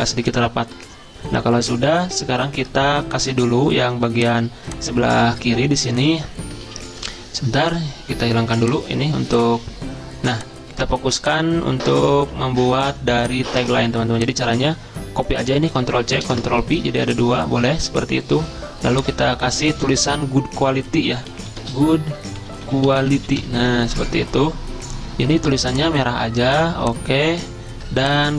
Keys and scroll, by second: 6.6 ctrl+z, 15.8 ctrl+c, 16.3 ctrl+v, 19.2 ctrl+a, 21.1-23.4 typing, 23.9 ctrl+a.